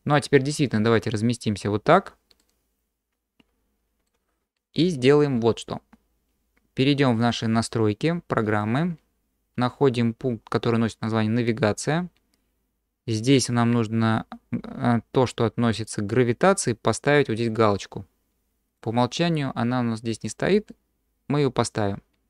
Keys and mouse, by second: 2.4-4.1 drag, 7.3-8.7 drag.